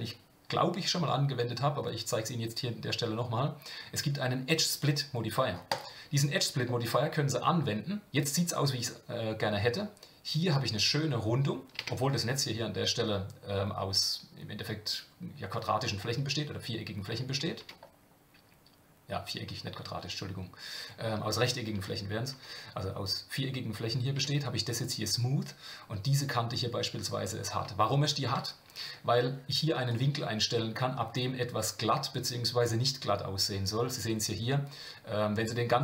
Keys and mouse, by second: 6.6-9.1 middle drag, 11.8 Tab, 17.6 Tab, 21.5 shift+middle click, 22.3 Tab, 24.2 Tab, 29.9-35.8 drag.